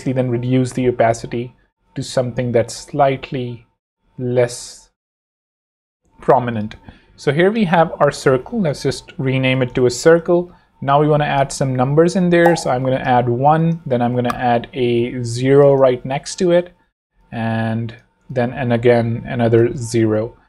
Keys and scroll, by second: 5.3 Escape, 5.8 v, 8.3 super+r, 9.2-10.9 typing, 12.5-13.9 typing, 14.1 alt+shift+v, 16.3 alt+shift+0, 16.8 v.